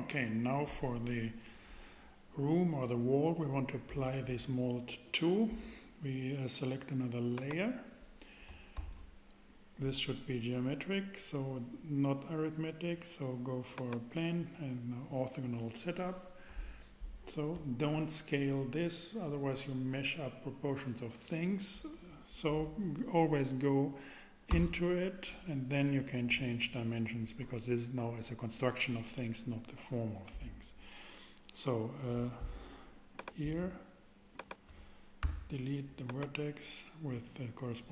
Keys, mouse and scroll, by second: 7.3-9.3 drag, 8.7 shift+a, 24.5 Tab, 25.5 Tab, 33.1-34.3 drag, 35.2 x, 35.7 x.